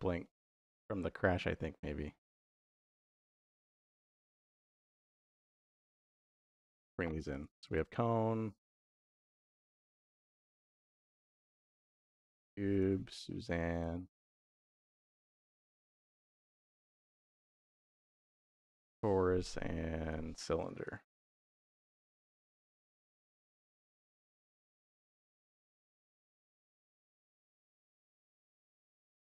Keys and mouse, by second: 0.1 middle click, 1.3 middle click, 2.7 middle click, 5.0 middle click, 5.5 middle click, 5.8 middle click, 6.5-8.2 drag, 8.7 click, 9.1-10.9 drag, 11.5-14.0 drag, 13.4 n, 14.6-18.1 drag, 16.5 BackSpace, 18.1 BackSpace, 19.8-22.7 drag, 24.1 click, 26.9 middle click, 27.8 click, 28.8 x.